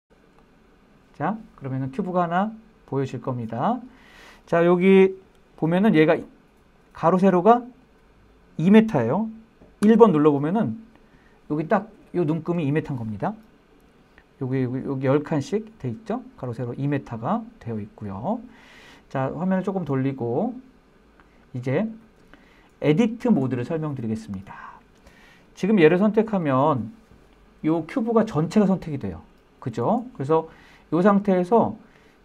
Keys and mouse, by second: 1.3-3.5 middle drag, 5.2-5.8 middle drag, 6.8-7.7 middle drag, 8.9 KP_1, 11.2-11.6 shift+middle drag, 18.7-20.5 middle drag, 21.0 shift+middle drag, 21.4-23.8 middle drag, 24.8 click.